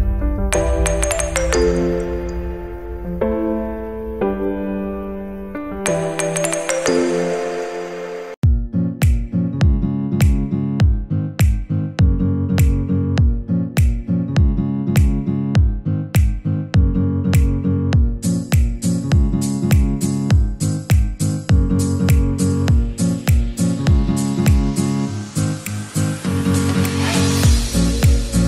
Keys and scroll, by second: 7.6 ctrl+Return, 27.2 alt+BackSpace.